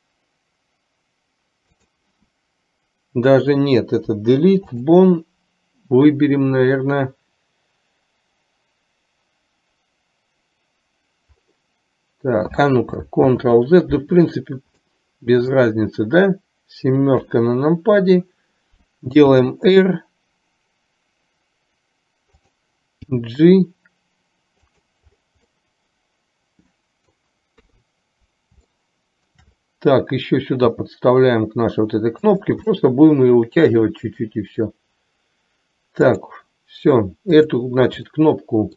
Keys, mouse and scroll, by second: 4.1 Delete, 13.4 ctrl+z, 15.0 middle click, 17.4 KP_7, 19.5 r, 23.1 g, 25.7-27.2 middle drag, 27.2 scroll down 1, 27.7 KP_3, 28.9 shift+middle click, 30.7 g, 33.0-34.5 middle drag, 36.1 click, 37.5 click, 38.2 middle click.